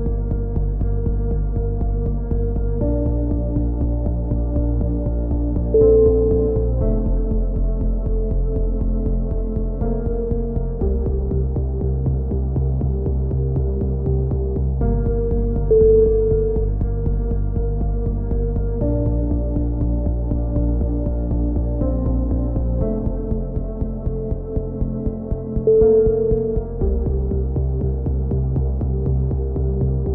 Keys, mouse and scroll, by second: 0.9 click, 1.8 g, 4.8 middle click, 4.8 a, 5.0 z, 6.3 middle click, 6.6 click, 7.4 ctrl+KP_7, 7.8 z, 8.6 click, 10.4 c, 11.0-12.6 drag, 12.7 a, 12.9 z, 13.5 z, 14.2 z, 15.6 z, 16.1 z, 16.2 middle click, 16.6 click, 18.3-19.4 drag, 19.4 ctrl+KP_7, 19.6 z, 20.3-21.3 drag, 21.6 c, 22.1-23.3 drag, 25.3-26.3 right drag, 25.9 click, 30.0 c.